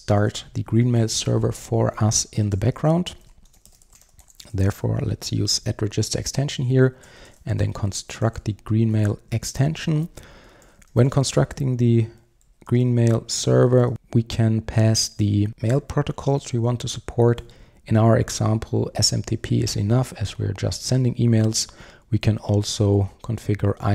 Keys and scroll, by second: 8.9 Return, 13.9 Return.